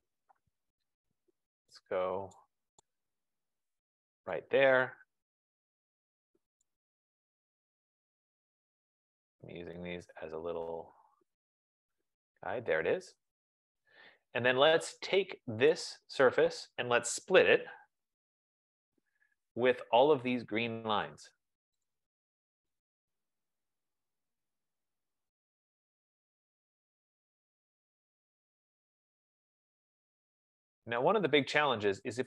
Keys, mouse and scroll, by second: 0.3 right click, 2.7 right click, 7.6 right click, 12.6 click, 15.1 click, 15.8 click, 17.3-19.0 typing, 21.1 typing, 21.2 click, 22.0 click, 22.8 click, 24.1 click, 24.4 F15, 25.8 click, 26.8 click, 28.2 click, 28.6 click, 30.2 click, 31.0 click.